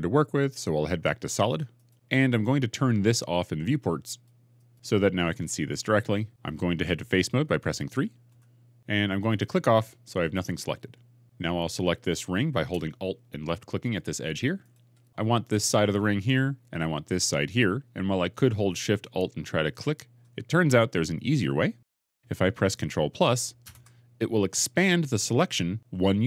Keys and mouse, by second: 1.7-4.0 drag, 4.4 middle click, 8.2 3, 23.5 ctrl+KP_Add.